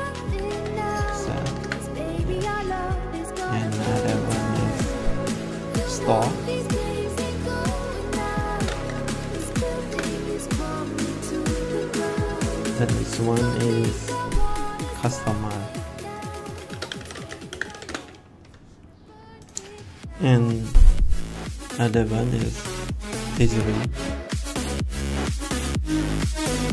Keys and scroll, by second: 0.0-1.9 typing, 8.2-9.3 typing, 9.8 Return, 16.4-18.1 typing, 25.1 shift+h, 25.8 i, 26.1 s.